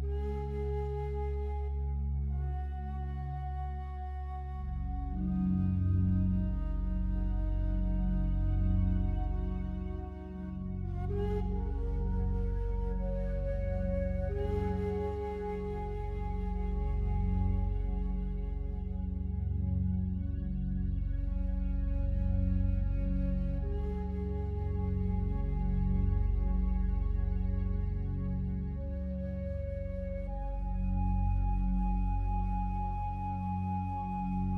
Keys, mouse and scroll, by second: 1.6 click, 4.4 click, 5.8 click, 6.3 click, 6.6 click, 7.3 click, 7.4 click, 8.3 click, 8.5 click, 10.6 click, 10.9 click, 14.7 click, 15.7-17.1 typing, 18.3 click, 18.7 click, 19.9-21.0 typing, 22.1-26.4 typing, 29.3-31.6 drag, 32.1 click.